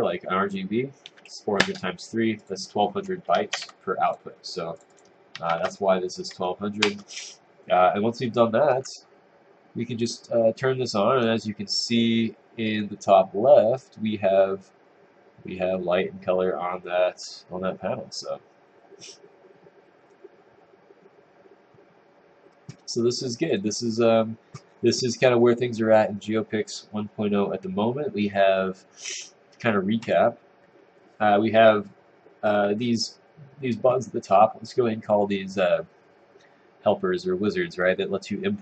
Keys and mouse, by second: 6.8 Return.